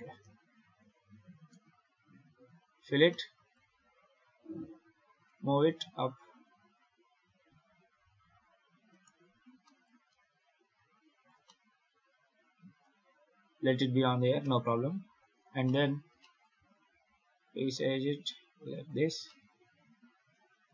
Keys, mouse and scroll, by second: 1.0 scroll down 4, 1.2 scroll up 1, 1.3 Tab, 2.0 z, 2.5 f, 3.0 middle click, 4.0 a, 4.5 Tab, 5.1 g, 9.2-9.5 scroll up 6, 9.5 shift+middle click, 10.0 g, 11.3 middle click, 12.7-14.3 scroll down 9, 14.3 KP_7, 15.2 scroll up 2, 15.5 shift+middle click, 15.8 shift+scroll down 2, 16.1 shift+middle click, 16.7 s, 19.1 shift+middle click.